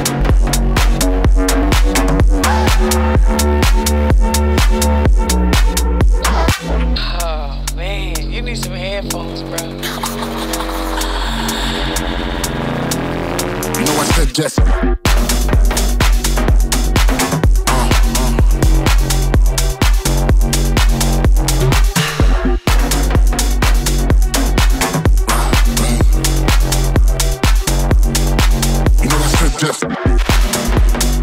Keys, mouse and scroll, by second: 4.0 scroll down 2, 4.1-4.8 scroll up 1, 17.1-31.2 drag.